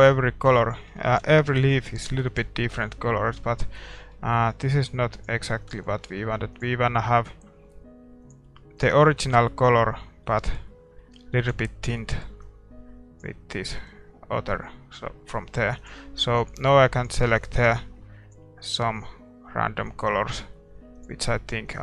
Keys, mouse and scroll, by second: 0.6-2.2 middle drag, 1.2 ctrl+s, 2.4 ctrl+s, 5.5-9.1 ctrl+s, 8.8-10.6 middle drag, 11.4 ctrl+s, 20.8-21.8 middle drag.